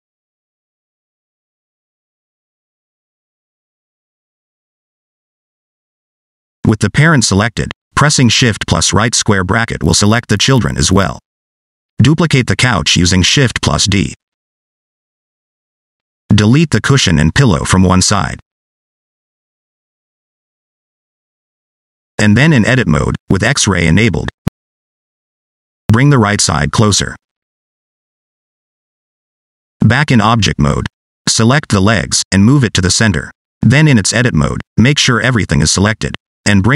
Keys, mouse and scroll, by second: 0.7-1.0 scroll down 1, 1.0 click, 1.6 click, 2.1 g, 3.2 s, 7.3 click, 8.0 scroll down 2, 8.7 shift+middle click, 10.2 shift+], 12.9 shift+d, 14.7 click, 16.4 shift+click, 17.3 x, 18.3 scroll down 1, 19.0 click, 20.7 click, 21.7 Tab, 22.3 scroll up 3, 22.6 shift+middle click, 24.5 n, 25.2 shift+middle click, 26.3 alt+z, 27.2 click, 28.5 click, 30.0 Tab, 30.7 click, 32.8 click, 35.5 Tab, 36.4 click.